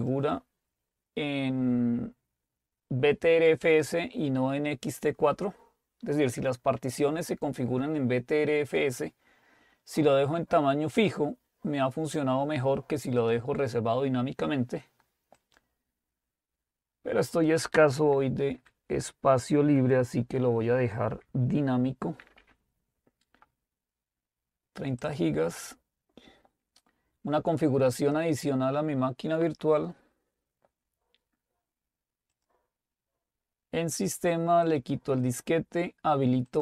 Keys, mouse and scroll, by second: 0.0 click, 13.2 click, 15.4 click, 17.7 click, 18.5 Delete, 22.0-23.1 typing, 25.1 click, 28.0 click, 32.3 click, 34.7 click.